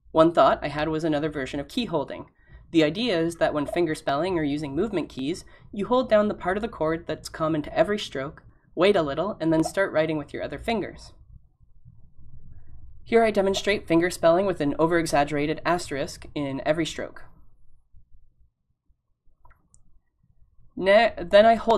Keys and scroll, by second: 15.2 *, 16.7 *, 17.3 *.